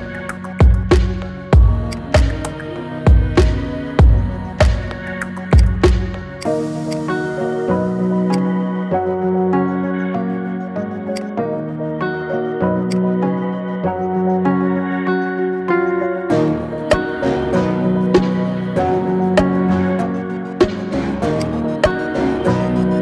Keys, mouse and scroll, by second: 0.5 ctrl+r, 2.3-2.6 scroll up 3, 2.6 shift+middle click, 3.1 scroll down 5, 4.0 p, 5.0 Tab, 5.5 click, 6.2 click, 6.7 click, 8.1 click, 9.2 KP_1, 11.0-13.5 right drag, 14.7-16.0 scroll down 5, 16.8-19.4 shift+drag, 21.2 click, 21.6-22.5 middle drag, 22.5-22.9 scroll up 2, 22.9 middle click.